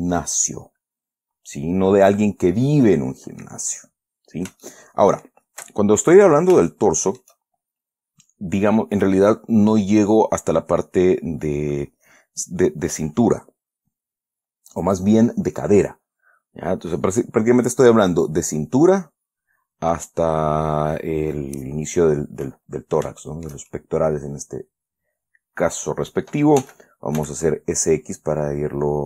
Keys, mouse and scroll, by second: 1.4-1.8 scroll down 2, 2.9-4.0 middle drag, 4.1-4.5 scroll up 2, 5.0 shift+middle click, 5.8 shift+scroll down 2, 7.0 shift+scroll down 2, 7.0 shift+middle click, 7.7-8.2 shift+scroll up 1, 22.8-24.0 middle drag, 24.1 shift+middle click, 24.7-26.9 scroll down 2, 26.9 s, 27.5 x.